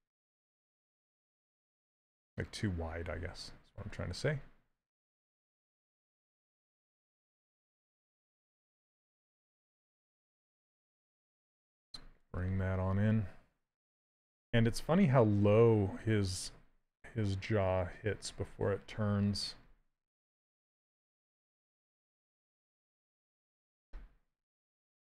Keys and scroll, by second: 0.3 q, 1.8 s, 18.6 s.